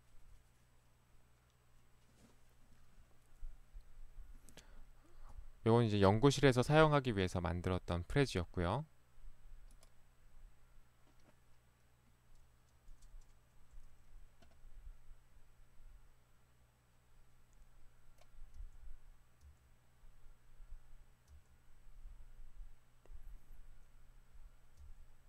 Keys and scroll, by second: 18.6 Right, 19.6 Right, 21.3 Right, 24.8 Right.